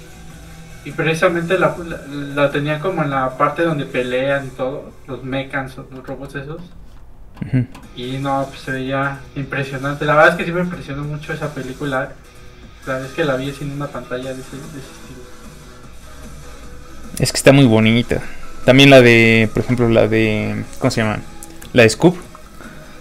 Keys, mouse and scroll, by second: 2.6 scroll up 1, 3.2 click, 4.7-5.1 scroll down 1, 6.0 middle click, 6.2-6.8 scroll up 1, 8.8 click, 10.2 scroll up 1, 11.4 click, 20.2-21.2 scroll down 1, 21.2 click.